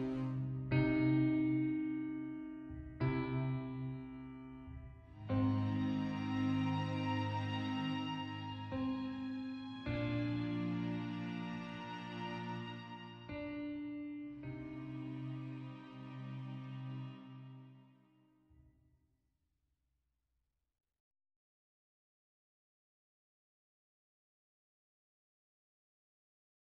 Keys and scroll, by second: 14.6 v.